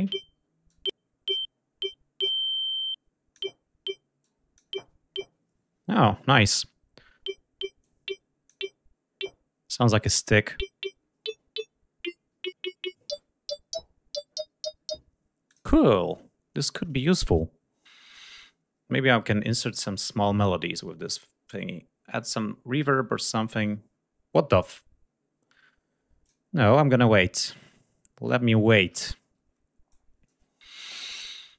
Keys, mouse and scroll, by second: 0.3-3.1 drag, 3.8 click, 7.4 click, 15.1 click, 25.9 click, 27.1-28.3 drag.